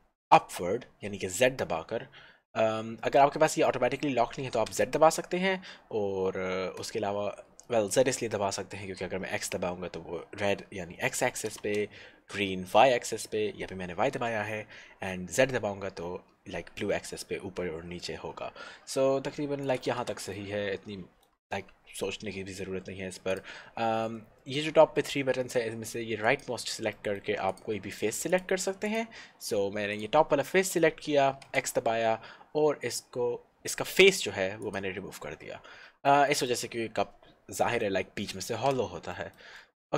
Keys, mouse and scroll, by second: 8.9 x, 19.9 click, 20.1 Tab, 20.4 middle click, 21.7 Tab, 22.3-23.3 scroll up 1, 23.3 click, 27.1 middle click, 27.6 click, 30.5 middle click, 31.6 x, 35.3 middle click, 37.2-37.6 scroll down 1, 37.7 middle click, 39.3 shift+middle click, 39.6 middle click.